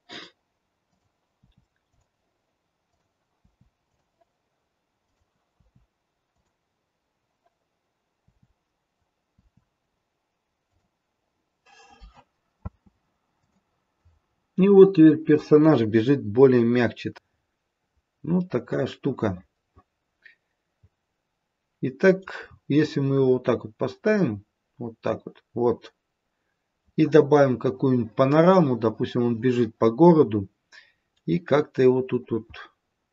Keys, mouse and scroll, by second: 0.9 click, 1.4 i, 2.8 click, 3.3 i, 4.9 click, 5.5 i, 9.3 i, 12.5 space, 13.4 click, 14.2-14.9 scroll up 4, 14.9-15.5 scroll down 1, 15.5-16.3 scroll down 3, 17.2-18.1 scroll up 2, 18.1 scroll down 2, 18.7 middle click, 20.6 middle click, 22.3-23.4 scroll down 5, 23.4 middle click, 25.0 middle click, 25.9 middle click, 31.1 middle click, 31.2 middle click.